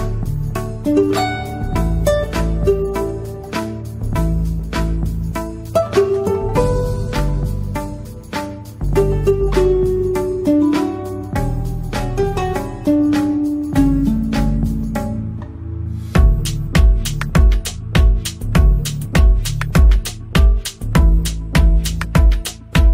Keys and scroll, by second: 9.7 space, 10.1 F2, 11.0 space, 19.8 space, 22.8 F2.